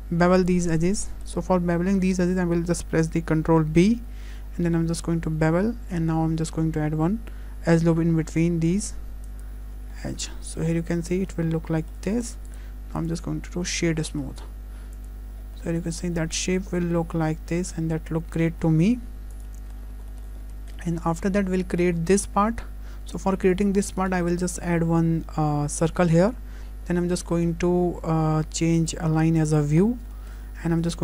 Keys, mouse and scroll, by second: 1.5 scroll up 4, 1.8 shift+middle click, 9.7-10.2 scroll down 7, 10.6 Tab, 10.6 middle click, 11.0 scroll down 1, 11.3 middle click, 12.5 right click, 13.5 scroll down 1, 13.7 middle click, 15.0 click, 15.4-15.9 scroll down 3, 15.6 middle click, 15.9-16.3 scroll up 4, 16.4 shift+middle click, 16.8 middle click, 17.1 middle click, 17.2 shift+middle click, 18.9 `, 19.8 scroll down 4, 20.1 shift+middle click, 20.4-20.8 scroll up 3, 20.8 shift+middle click, 21.1-21.5 scroll down 2, 21.8-22.2 scroll up 2, 23.5 shift+middle click, 24.1 shift+a, 26.2-27.3 scroll down 8, 27.3 shift+middle click, 28.8 click, 29.8-30.1 scroll up 3, 30.1 shift+middle click.